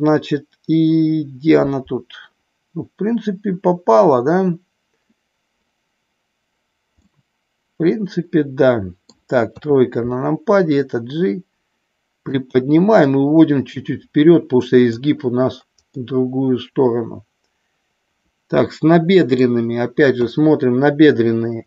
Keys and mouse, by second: 7.0-9.2 middle drag, 9.5 KP_3, 10.7-12.2 drag, 13.0-14.9 drag, 15.8-19.4 middle drag, 20.1 KP_1.